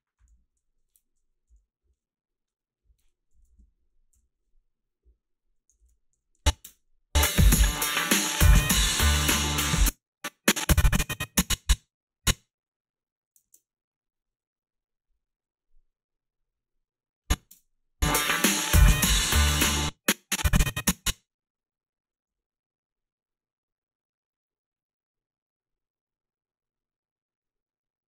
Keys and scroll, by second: 0.4 a, 1.5 Up, 3.3 Up, 3.4 Up, 3.6 Up, 4.1 g, 6.6 space, 9.6 space, 13.4 alt+shift+s, 17.5 space, 19.6 space, 22.3 s.